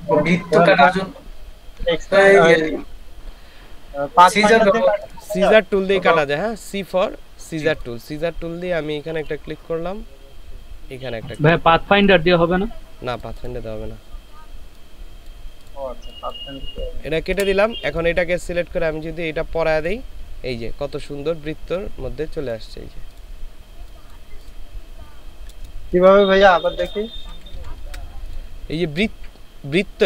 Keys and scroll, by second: 17.4 Delete, 25.8 ctrl+space, 26.4 ctrl+space, 27.1 ctrl+space, 27.3 ctrl+z.